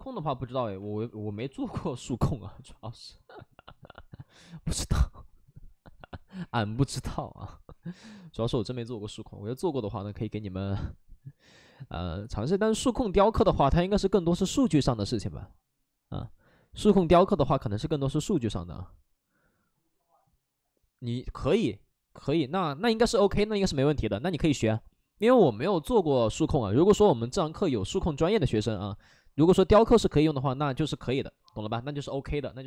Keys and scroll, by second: 0.7 alt+s, 1.3 space, 2.3 alt+s, 4.5 alt+s, 6.7 alt+s, 32.6 3.